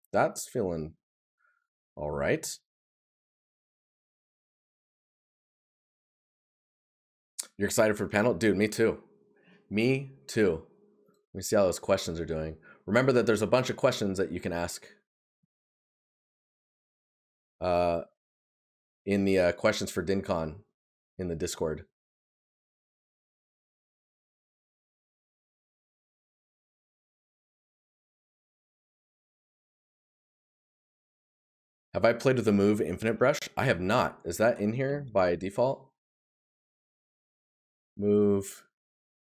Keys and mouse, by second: 5.8 right click, 32.4 right click.